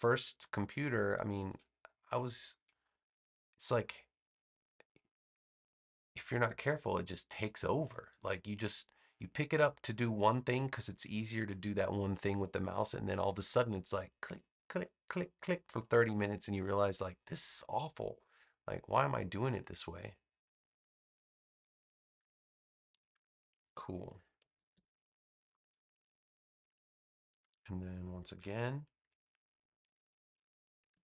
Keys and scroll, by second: 24.5 super+-, 26.0 space, 29.8 v, 30.8 super+c.